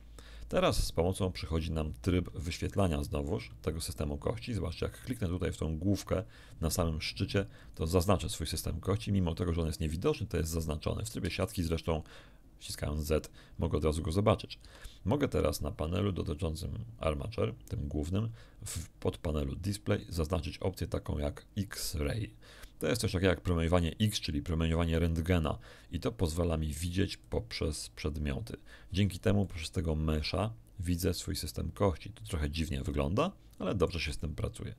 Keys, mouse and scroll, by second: 2.7 shift+middle click, 7.7 right click, 11.2 z, 14.6 z, 27.2 click, 29.4-33.0 middle drag, 33.2 middle click, 34.2-34.7 middle drag.